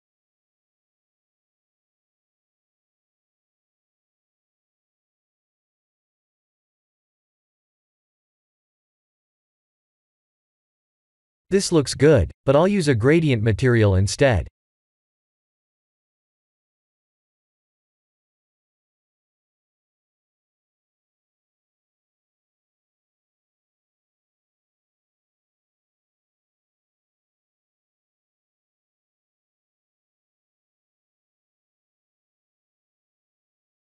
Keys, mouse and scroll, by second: 1.5 click, 3.3 click, 4.5 click, 9.6 click, 17.6 click, 18.7 shift+middle click, 19.3 shift+a, 23.9 shift+a, 27.8 click, 28.0 click, 28.4 click, 29.3 click, 30.8 click, 32.4 click.